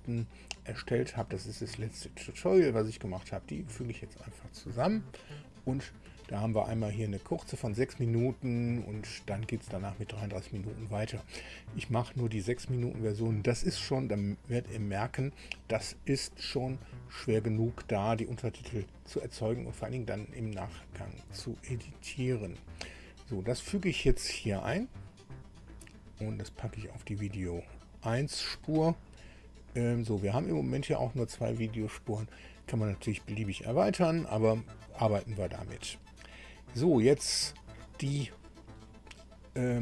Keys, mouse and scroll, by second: 3.9 click, 12.2 click, 23.7-28.5 drag, 29.6-30.0 scroll up 2, 30.1-30.4 scroll down 2.